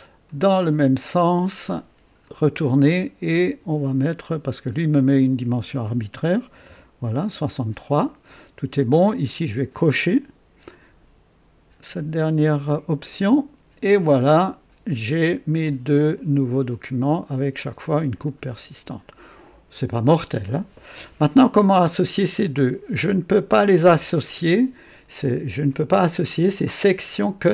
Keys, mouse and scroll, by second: 0.2 click, 2.2 click, 3.3-4.4 drag, 5.0 click, 6.4 KP_6, 6.6 KP_3, 7.2 Return, 9.7 click, 13.0 click, 16.1 click, 17.3 click, 18.2-21.5 drag.